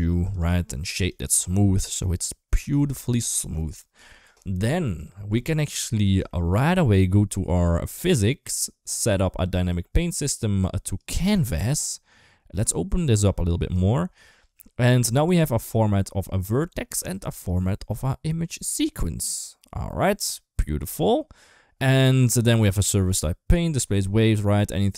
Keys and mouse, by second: 0.2 click, 0.9 right click, 1.8 middle click, 2.7 shift+middle click, 3.1 middle click, 5.4 middle click, 6.1 shift+middle click, 9.4 click, 10.8 click, 12.4-13.7 drag, 15.1 click, 15.4-16.8 drag, 17.2-18.5 drag, 22.4 click, 24.8 click.